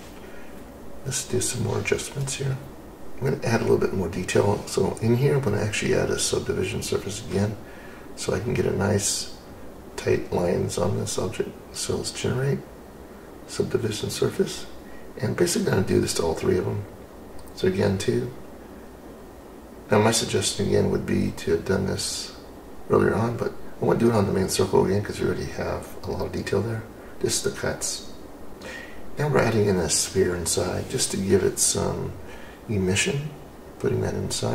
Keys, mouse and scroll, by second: 0.0 click, 5.7 click, 10.9 click, 12.7-16.5 drag, 18.7 click, 21.8 click, 22.8 click, 27.7 click, 28.5-34.1 drag.